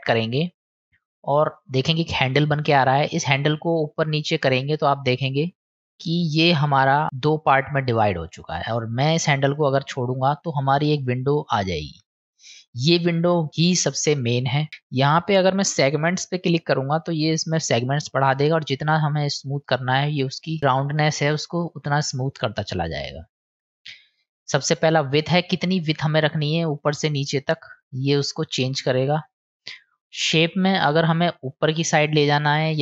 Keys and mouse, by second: 3.1-9.6 drag, 11.0 click, 15.7-20.6 drag, 21.3-23.6 drag, 25.3-29.6 drag, 31.6-32.8 drag.